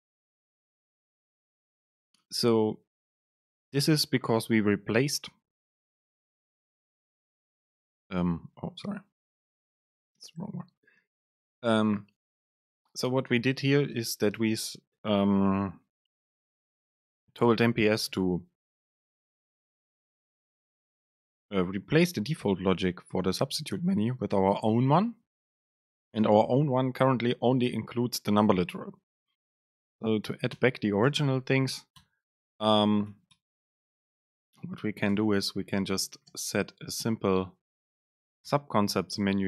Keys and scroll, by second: 29.2 Up, 29.9 Down, 30.3 Home, 30.7 Return, 31.2 super+space, 33.2 BackSpace, 34.0 alt+Down, 35.2 BackSpace, 35.8 Return, 36.2 super+space.